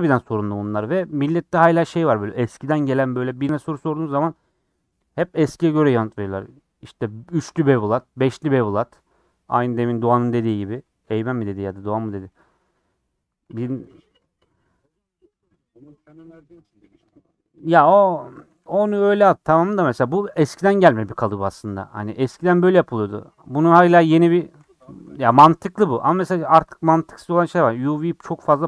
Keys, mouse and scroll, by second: 11.9-13.4 middle drag, 13.4 KP_Decimal, 13.9 middle click, 14.2 scroll down 2, 14.5 middle click, 15.4 click, 15.6 middle click, 16.0 2, 16.5 click, 16.7 middle click, 17.6 click, 18.6 ctrl+z, 18.8 click, 19.6-24.7 middle drag, 24.7 scroll down 1, 24.8 middle click, 25.5 scroll up 1, 25.7 middle click, 26.0 scroll down 3, 27.4 a, 27.6 u.